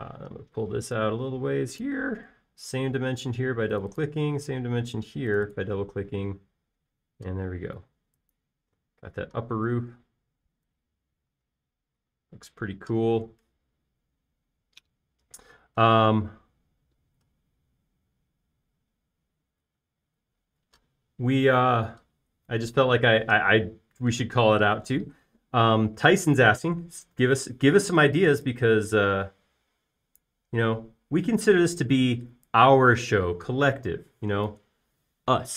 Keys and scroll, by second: 7.6-8.1 typing, 12.0 space, 29.2 f, 33.4 Escape.